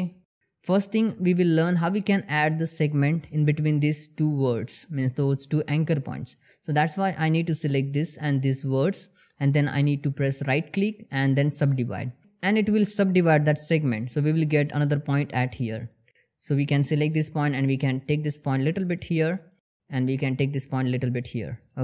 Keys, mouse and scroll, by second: 6.3 click, 7.3 shift+click, 10.0 right click, 11.1 click, 14.5 click, 16.8 g, 18.3 click, 19.4 g, 20.5 click, 21.7 g.